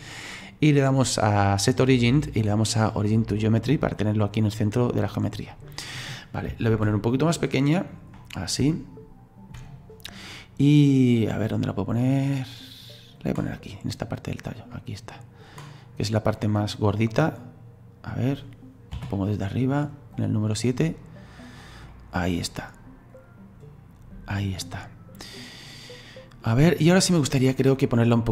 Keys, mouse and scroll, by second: 4.4-6.7 drag, 6.7 s, 8.1-8.7 scroll up 4, 8.7-10.1 shift+middle drag, 10.1-14.7 drag, 14.7 middle click, 15.4 click, 16.4 middle click, 17.3-18.9 drag, 18.9 KP_7, 20.1-21.9 drag, 21.9-24.9 middle drag, 25.4 right click, 27.2-28.3 drag.